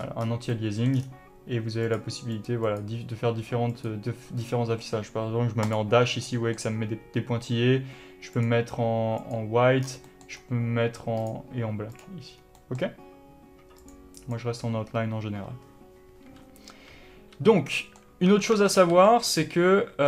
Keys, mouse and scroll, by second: 0.2-0.8 scroll up 2, 1.2-2.1 scroll down 2, 2.1 click, 2.6 click, 2.9 click, 4.0-6.5 drag, 6.5-8.6 middle drag, 8.6-10.4 drag, 10.1 scroll down 1, 10.4-11.5 middle drag, 10.7-11.5 scroll up 1, 11.5-12.9 drag, 12.7 scroll down 1, 12.9-14.1 middle drag, 14.1-18.0 drag, 17.6 n, 18.0-20.0 middle drag, 18.5 Tab.